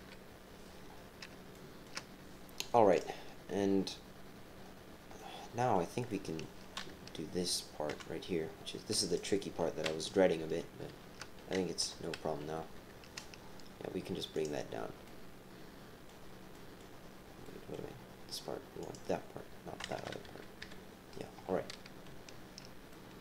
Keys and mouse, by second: 1.5 shift+click, 1.6 shift+middle click, 1.7 shift+click, 2.9 click, 4.6 click, 5.1 click, 6.1 middle click, 6.9 KP_3, 7.9 KP_3, 9.1 click, 9.2 typing, 10.4-12.7 typing, 14.3 click, 15.0-16.0 middle drag, 16.5 click, 16.6 middle click, 16.7 click, 17.4 click, 18.8 click, 19.8 KP_7, 20.2 KP_7, 20.3 KP_3, 20.6 KP_1, 22.9 shift+click.